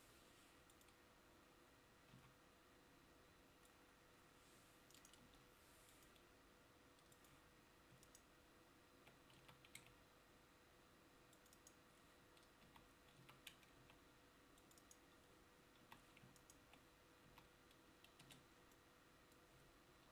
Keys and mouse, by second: 2.3 c, 5.4 Delete, 12.8 f, 13.3 a, 15.9 f, 17.4 f, 18.4 Tab.